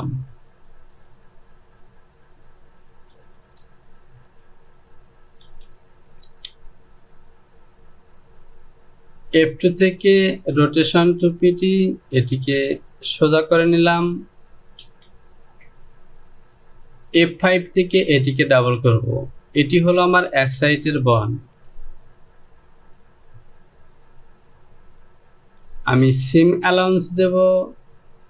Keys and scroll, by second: 3.8 j, 5.9 Home, 15.4 Delete.